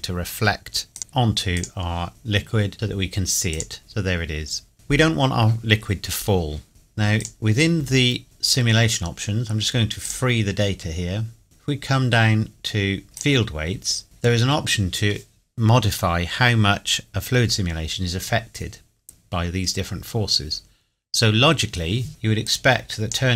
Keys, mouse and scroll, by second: 0.9 click, 3.8-4.1 middle drag, 6.4 scroll up 2, 6.7 click, 8.1 scroll down 1, 8.9 scroll up 1, 10.0 click, 11.1 scroll down 1, 13.2 click, 13.8 scroll down 1, 22.4 click.